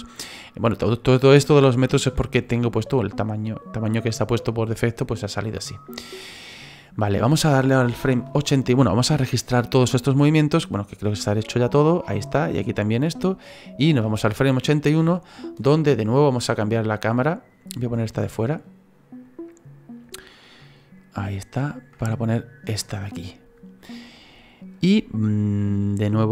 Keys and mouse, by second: 10.9 click, 12.3 click, 14.0 Right, 15.6 middle click, 18.6 click, 22.0 ctrl+middle click, 26.0 click.